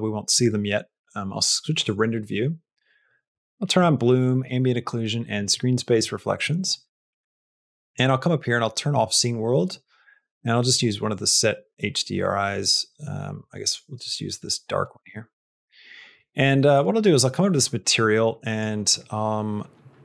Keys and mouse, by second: 3.7 click, 4.2 click, 5.2 click, 6.1 middle click, 6.7 shift+middle click, 7.9-13.8 drag, 18.4-20.0 drag.